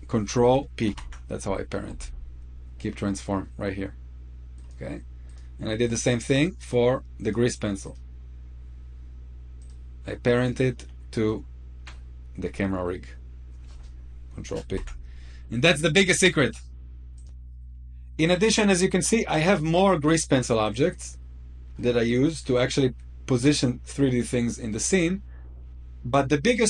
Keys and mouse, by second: 0.6 ctrl+p, 4.3-5.0 right drag, 5.1 right drag, 5.6 click, 6.1 middle drag, 7.6 click, 9.3 click, 10.2-11.0 middle drag, 14.4 ctrl+p, 16.9 click, 17.2 shift+middle click, 18.3-19.0 shift+middle drag, 19.3-19.7 middle drag, 20.4 click, 21.5-22.0 shift+middle drag, 23.9-24.4 middle drag, 24.6-25.2 shift+middle drag.